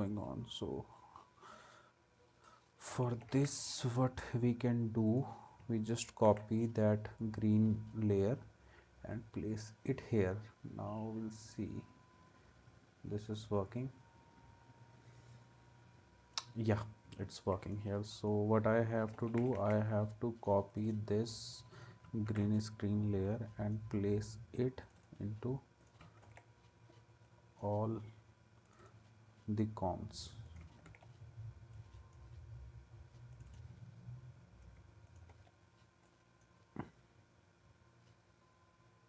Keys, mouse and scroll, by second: 2.9 ctrl+c, 6.3 ctrl+v, 17.2 ctrl+s, 19.1 ctrl+c, 22.3 ctrl+v, 24.8-26.0 drag, 26.2 ctrl+v, 30.9 ctrl+v, 35.3 ctrl+v.